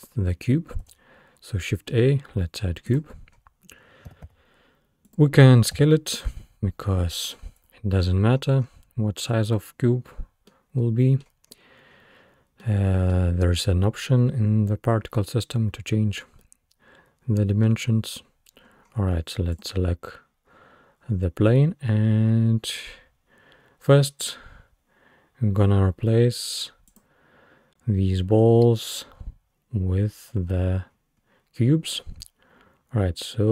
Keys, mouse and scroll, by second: 0.9 shift+a, 3.3-3.8 scroll down 2, 4.1 g, 5.8 s, 8.0-9.2 scroll up 6, 10.2-10.5 scroll down 3, 10.5-11.5 middle drag, 11.5-12.3 scroll up 3, 12.3 scroll down 1, 12.6-15.6 middle drag, 15.6-16.2 scroll up 2, 16.2 scroll down 2, 16.5-17.9 middle drag, 17.9-18.2 scroll up 1, 18.2-18.6 scroll down 2, 18.6-19.4 scroll up 5, 19.5 click, 23.0 scroll down 1, 23.6-25.2 scroll down 4, 26.9-28.6 drag, 28.6-29.2 scroll down 2, 29.2-29.5 scroll down 1, 30.5-31.8 scroll up 5, 31.8-32.2 scroll up 1, 32.2-33.2 scroll down 4, 33.2-33.5 scroll down 3.